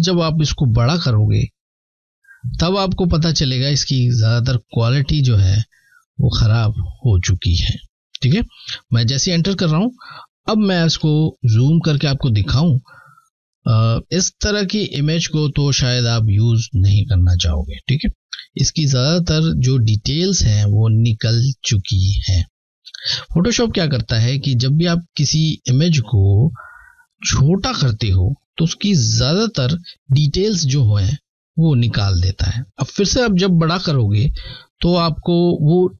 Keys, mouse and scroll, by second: 0.6 shift+click, 7.4 Return, 8.7 click, 9.0 click, 10.0-10.4 alt+scroll up 3, 12.7 typing, 17.0 alt+scroll up 1, 17.0-17.8 typing, 17.3-17.8 alt+scroll down 3, 19.0 scroll up 2, 19.1 typing, 21.2 typing.